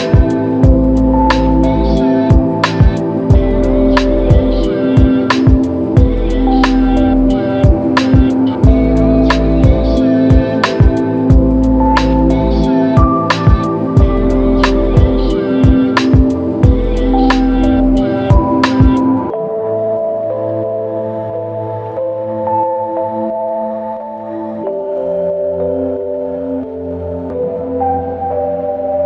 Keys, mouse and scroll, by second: 0.6 ctrl+click, 0.9 ctrl+click, 5.1 alt+click, 7.2 alt+click, 15.7 ctrl+click, 16.6 ctrl+click, 20.7-21.5 s, 24.0 typing, 26.4 double click.